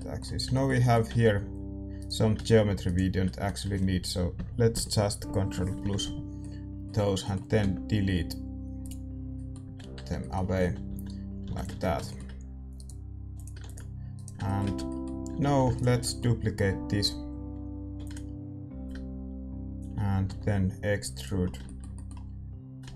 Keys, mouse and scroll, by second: 1.0 z, 1.7 a, 1.9-4.7 right drag, 3.2-5.2 middle drag, 4.3 ctrl+KP_Add, 4.7 ctrl+KP_Add, 5.2 ctrl+KP_Add, 6.3-13.3 middle drag, 8.8 x, 9.6 z, 9.9 Tab, 10.6 a, 10.8 a, 11.4 a, 11.5-15.2 drag, 13.3 ctrl+s, 14.1 ctrl+s, 14.1-17.9 right drag, 14.4-17.9 middle drag, 14.7 Tab, 15.2 a, 15.4 a, 17.9 shift+d, 18.9-21.1 drag, 20.2 e, 21.4-22.7 middle drag, 22.7-22.9 drag.